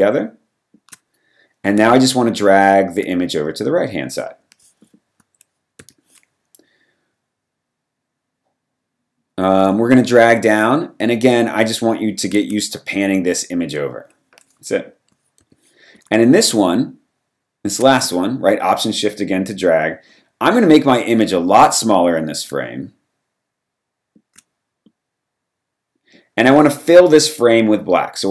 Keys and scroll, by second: 5.8 v, 15.4 v, 26.9 v.